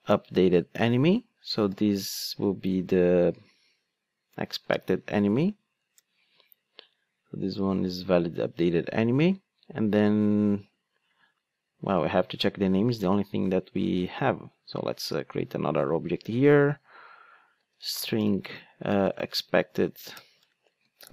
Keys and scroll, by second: 0.1 Return, 4.9 alt+Return, 15.1 Tab, 20.2 Return.